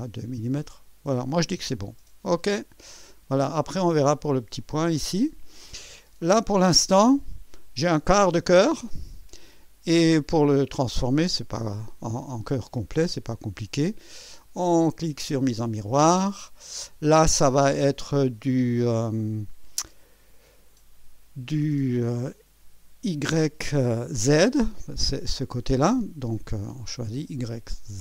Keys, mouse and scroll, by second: 0.0-1.6 drag, 2.3 click, 3.3-4.0 drag, 4.6-7.0 drag, 7.1-9.5 drag, 12.2-13.0 drag, 15.6 click, 27.0 click.